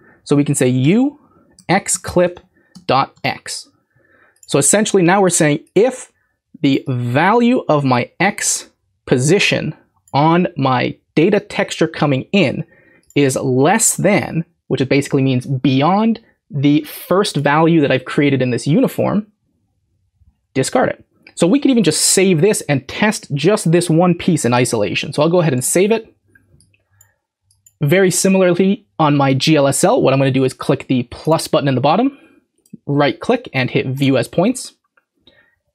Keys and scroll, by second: 0.6-3.6 typing, 25.5 ctrl+s.